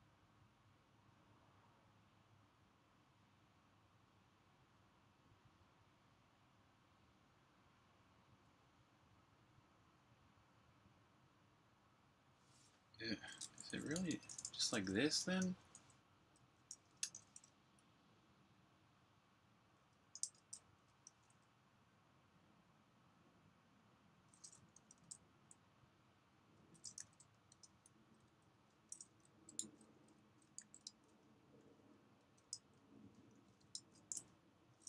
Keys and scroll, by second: 13.8-14.3 typing, 16.6-17.2 typing, 20.1-21.2 typing, 24.7 Escape, 24.9-29.4 typing, 30.5 typing, 32.0 space, 33.1-33.8 typing.